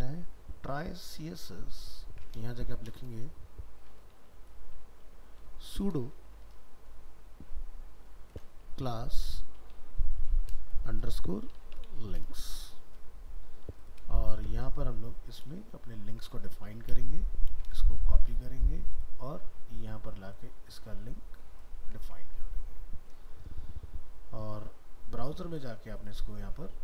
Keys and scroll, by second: 1.6 ctrl+shift+Left, 14.1 ctrl+a, 14.3 ctrl+c, 15.0 ctrl+a, 16.7 alt+f, 16.7 alt+秄, 17.5 ctrl+c.